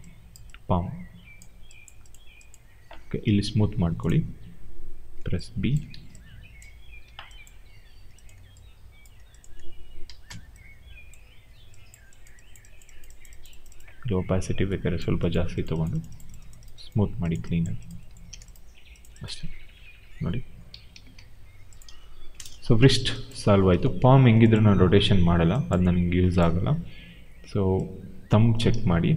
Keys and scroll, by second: 5.1 n, 7.6 w, 10.1 b, 18.2 w, 19.3 e, 20.6 ctrl+a, 22.2 Return, 28.6 ctrl+z.